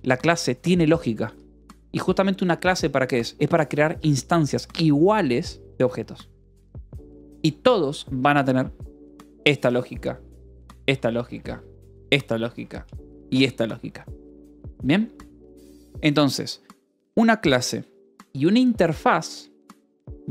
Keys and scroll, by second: 0.2-2.4 typing, 9.4 Escape, 9.7 j, 10.8 k, 12.2 k, 13.1 Escape, 18.2-19.7 typing.